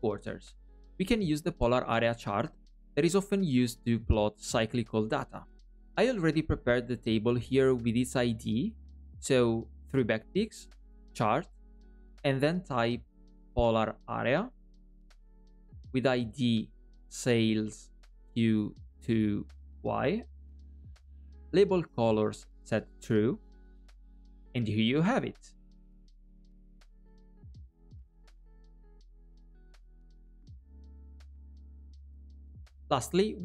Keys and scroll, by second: 9.7 alt+\.